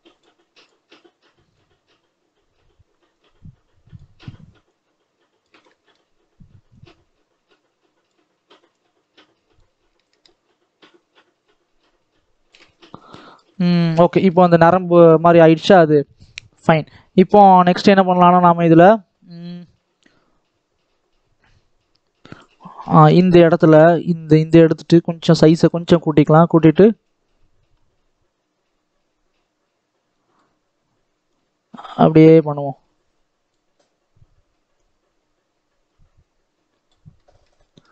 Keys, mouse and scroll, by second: 5.5-6.6 middle drag, 6.6-12.6 drag, 12.6-13.1 scroll down 6, 13.1 middle click, 13.7-15.2 scroll up 2, 15.2 middle click, 15.8 scroll down 1, 16.0 middle click, 16.3-17.4 scroll up 2, 22.7 scroll up 2, 23.0 scroll down 1, 23.5-25.1 shift+middle drag, 25.1 click, 25.8-26.9 scroll up 2, 26.9-30.0 drag, 31.1-37.0 drag, 37.0-37.9 middle drag.